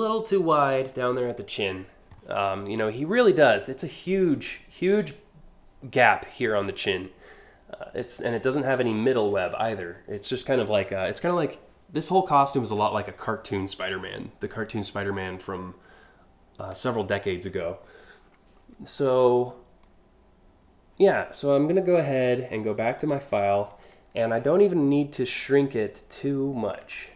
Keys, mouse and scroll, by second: 22.6 click, 26.5 a.